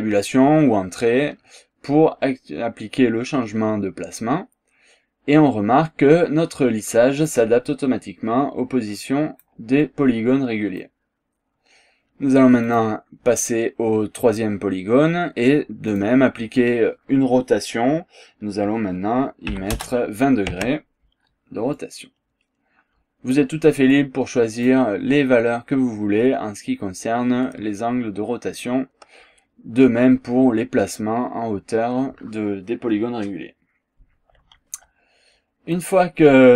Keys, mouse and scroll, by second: 2.0-2.4 scroll down 1, 2.4 scroll up 1, 3.0-7.5 drag, 7.7-9.6 drag, 9.8-11.0 drag, 12.7 click, 15.9 click, 19.6 KP_2, 19.8 KP_0, 20.6 Tab, 21.8-23.6 drag, 24.0 click, 35.0 scroll down 1, 35.4 scroll up 2, 35.8-36.5 drag.